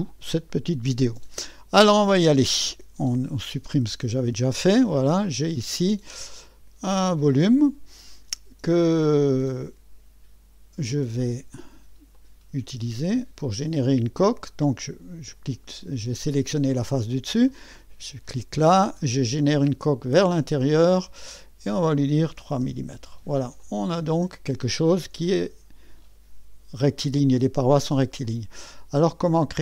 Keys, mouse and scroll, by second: 2.3 click, 2.8 Delete, 3.4 click, 3.7 Delete, 5.4-9.0 drag, 9.4-10.6 drag, 10.9-11.7 drag, 12.1 click, 12.6-13.3 drag, 17.5 click, 19.4 click, 21.3-22.4 drag, 22.4 3, 22.6 Return, 23.6-25.2 drag, 25.2 3, 28.2-29.6 drag.